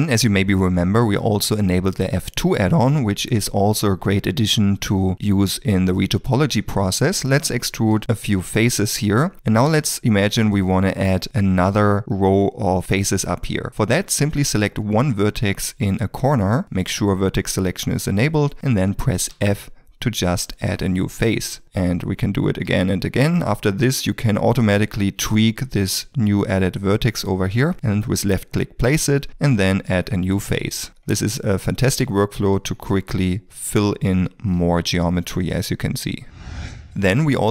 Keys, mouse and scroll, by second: 3.7 2, 3.8 shift+middle click, 4.9 middle click, 7.3 r, 7.9 s, 8.3 e, 10.2 1, 19.3 f, 29.2 f, 30.7 shift+middle click, 31.5 f, 31.5 middle click, 31.8 e, 32.6 1, 33.4 f.